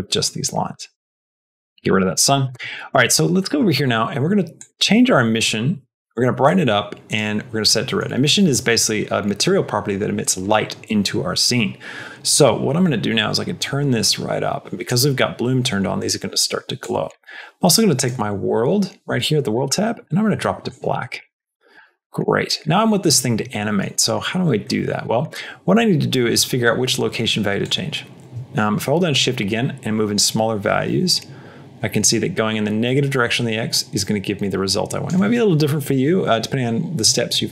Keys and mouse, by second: 0.8 click, 1.1 x, 3.3 middle click, 4.5 click, 7.8 middle click, 13.1-14.7 drag, 16.7 click, 21.0 click, 22.0 middle click, 22.3 middle click, 22.6 middle click, 23.5 middle click, 23.8 middle click, 24.6 middle click, 24.9 middle click, 27.5-34.9 drag.